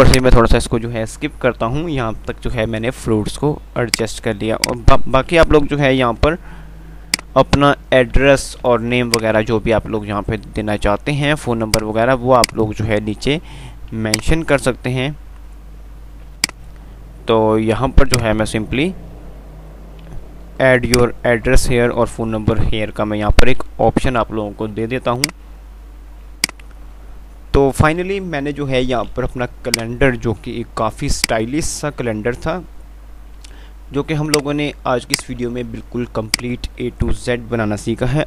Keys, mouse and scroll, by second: 0.2-0.9 typing, 0.4-2.2 drag, 2.2 F3, 4.2-6.4 drag, 6.4 shift+Page_Up, 8.6 alt+w, 9.4 click, 9.7 alt+w, 11.7-14.4 drag, 14.6 c, 16.6-20.7 drag, 20.7 F2, 25.1-28.1 drag, 28.1 F3, 30.0 click, 30.2 Delete, 35.4 ctrl+click, 36.6 right click.